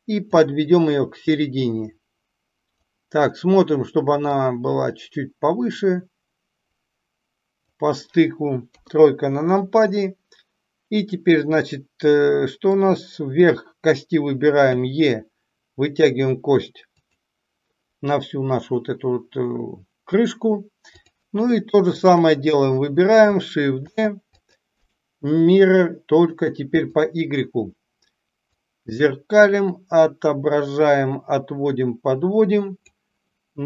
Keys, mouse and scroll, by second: 0.5-2.8 drag, 5.0-7.6 drag, 8.6 KP_3, 12.7 click, 14.7 e, 23.8 shift+d, 24.8-27.1 right drag, 28.5-32.8 drag.